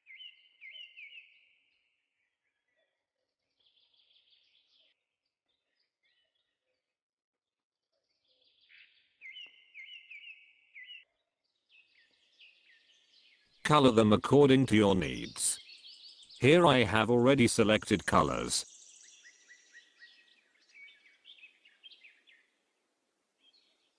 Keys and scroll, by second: 11.8 z.